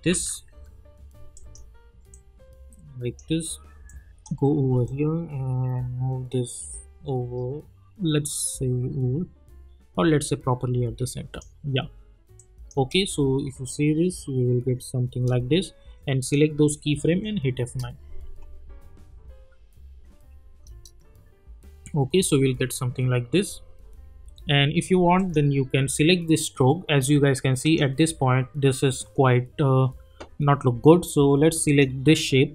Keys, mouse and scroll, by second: 0.3 typing, 1.3-12.4 drag, 12.7 space, 15.1 space, 16.2 click, 17.0 F9, 17.6 space, 19.6 space, 25.1 click, 27.6 click, 31.6 click.